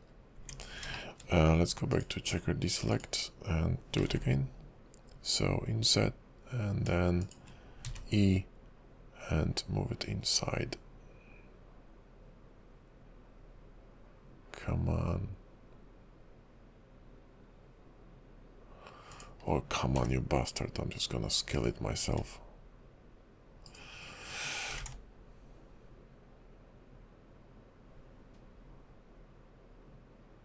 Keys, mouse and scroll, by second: 0.2 scroll up 1, 0.4 Tab, 1.1 shift+middle click, 1.9 click, 4.1 i, 8.0 e, 20.1 s, 22.2 s, 24.8 alt+s.